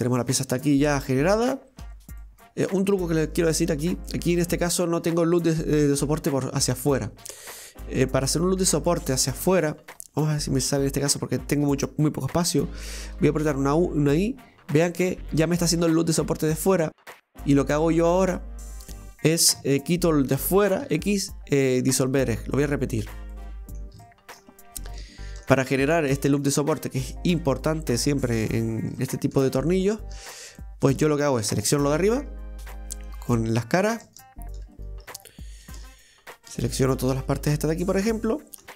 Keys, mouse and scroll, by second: 2.2 middle click, 2.9-3.4 scroll up 1, 3.4 shift+middle click, 3.8 scroll up 1, 4.1 middle click, 4.6 scroll up 1, 4.7 middle click, 5.6 right click, 7.6 click, 8.5 right click, 8.9 shift+right click, 9.2 shift+right click, 9.8 shift+right click, 10.2 shift+right click, 10.6 shift+right click, 11.1 shift+right click, 11.4 shift+right click, 13.1 i, 18.1-19.3 drag, 19.3 right click, 19.6 alt+shift+right click, 19.8 alt+shift+right click, 20.8 x, 22.6-23.3 scroll down 1, 23.3-24.6 middle drag, 24.6-24.9 scroll up 1, 24.9-28.7 shift+middle drag, 28.7 scroll down 1, 29.0 shift+middle click, 29.6 scroll up 1, 29.9 shift+middle click, 30.3 scroll up 1, 30.6-31.8 shift+middle drag, 31.8 right click, 33.1 click, 33.8 right click, 34.1 shift+right click, 34.8 right click, 35.2 shift+right click, 35.7 ctrl+shift+right click, 36.5 shift+right click, 37.2 shift+right click, 37.7 shift+right click, 38.1 shift+right click, 38.4 shift+right click, 38.6 ctrl+z.